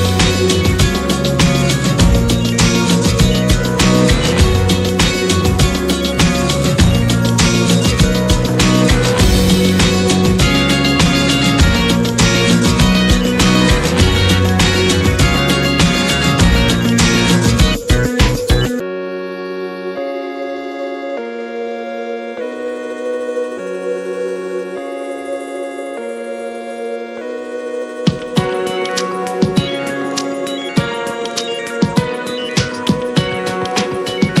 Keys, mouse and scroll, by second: 0.4 click, 1.9-12.7 drag, 13.1-28.6 drag, 29.4 click, 30.0-30.4 scroll up 5, 30.4 middle click, 30.7-31.1 scroll up 3, 31.1-32.1 middle drag, 32.1 scroll down 1, 32.4-33.1 scroll up 1, 33.1 s, 33.7 scroll down 5, 34.0-34.4 middle drag.